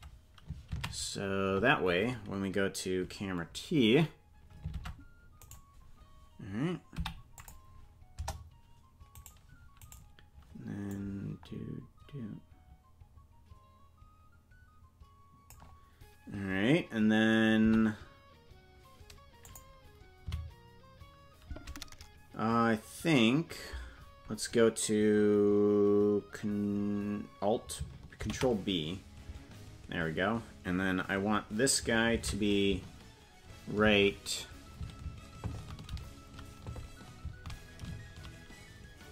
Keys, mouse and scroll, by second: 3.6 ctrl+Tab, 4.8 ctrl+s, 5.5 right click, 6.9 i, 8.1 KP_0, 9.3 right click, 10.1 right click, 10.9-15.6 drag, 17.6 i, 20.3 Right.